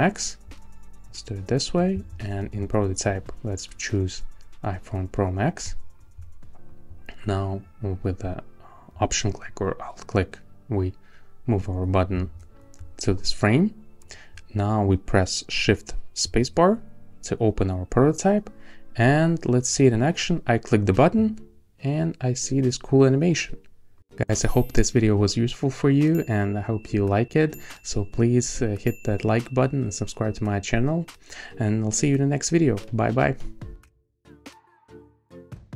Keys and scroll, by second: 16.2 shift+space.